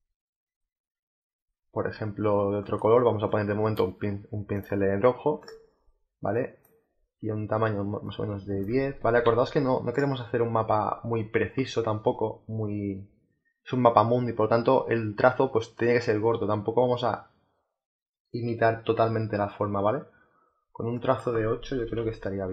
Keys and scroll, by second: 8.9 ctrl+z, 21.7 8.